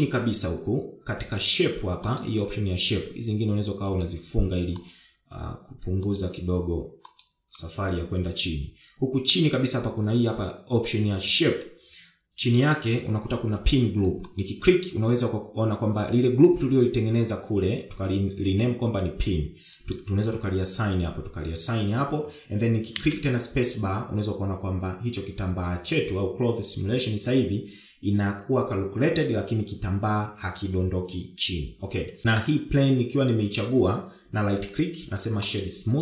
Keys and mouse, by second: 2.7 click, 4.5 click, 5.4 click, 6.7 click, 7.6 click, 15.0-20.6 drag, 23.6 space, 32.2 space.